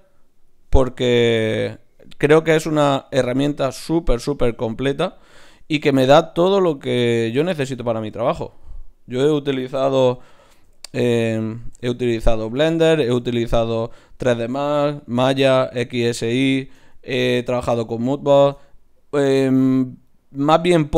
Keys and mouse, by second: 5.9 shift+q, 7.6-9.2 middle drag, 8.0 ctrl+Tab, 9.2-11.2 drag, 9.9 f, 10.1-10.6 f, 10.9 f, 11.6 ctrl+z, 11.8 ctrl+z, 12.3-13.7 middle drag, 13.7-15.0 right drag, 14.8 f, 15.0 click, 15.8 f, 20.8 ctrl+Tab.